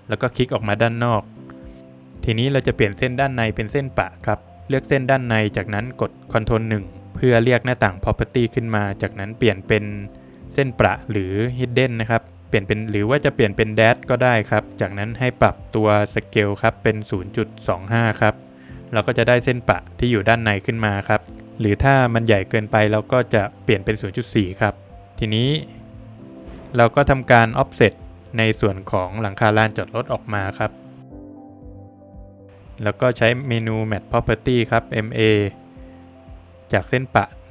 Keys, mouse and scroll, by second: 0.3 space, 0.8 middle click, 1.6 middle click, 1.7 Escape, 2.0 click, 2.5 scroll down 1, 2.6 middle click, 4.5 middle click, 4.7 middle click, 6.6 ctrl+1, 9.0 click, 9.4 double click, 11.0 click, 13.5 click, 15.4 click, 17.7 Return, 18.6-19.1 scroll up 3, 19.1 Escape, 19.8 middle click, 21.3 click, 23.9 Return, 24.4 Escape, 25.6 middle click, 26.5 Escape, 26.8 Escape, 28.0 space, 29.5 space, 30.6 click, 32.3 Escape, 34.5 space, 35.9 click.